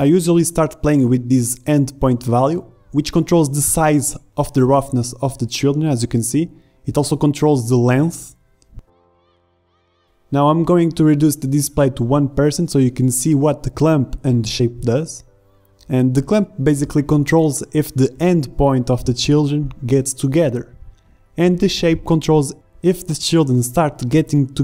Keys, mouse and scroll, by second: 2.7 middle click, 12.5 KP_Decimal, 14.1 middle click, 14.3 middle click.